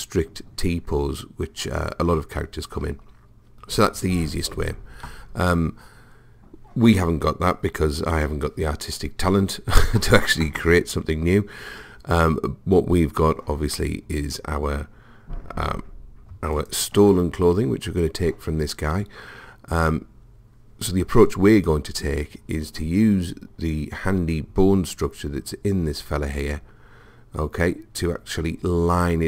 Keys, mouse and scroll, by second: 16.6 click.